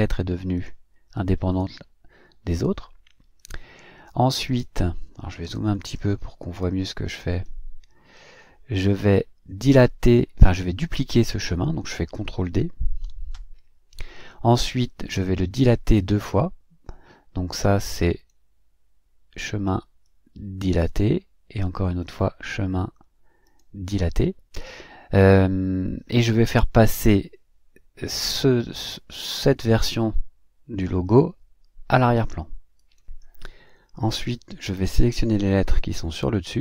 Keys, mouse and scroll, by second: 0.6 click, 6.9 click, 8.1 scroll up 1, 13.0 ctrl+d, 32.8 click, 34.7 click, 35.7 shift+click, 36.3 shift+click.